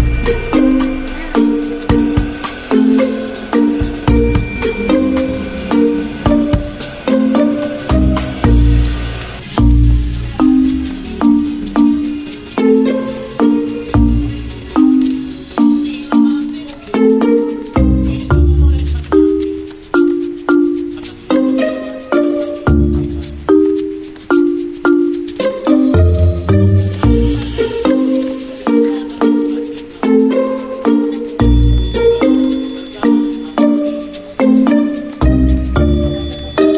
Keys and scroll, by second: 0.0-1.7 typing, 14.1 v, 20.0 d, 22.6 ctrl+z.